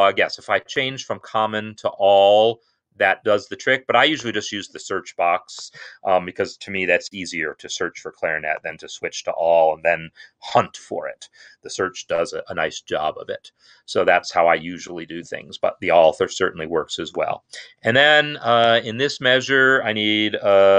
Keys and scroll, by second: 18.6 n.